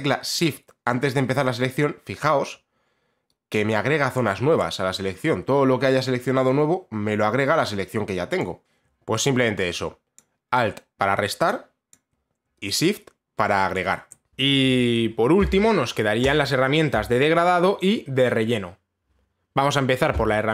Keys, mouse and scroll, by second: 3.7 shift+click, 8.0 shift+click, 9.8 alt+click, 11.5 alt+click, 13.4 shift+click, 16.9 click.